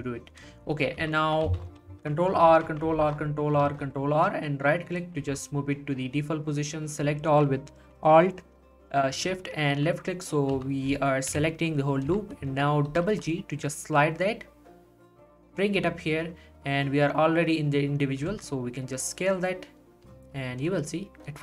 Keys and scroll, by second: 1.0 z, 1.5 z, 1.8 ctrl+r, 2.5 ctrl+r, 3.0 ctrl+r, 3.6 ctrl+r, 11.3 1, 12.0 z, 12.9 g, 18.2 g, 18.3 s.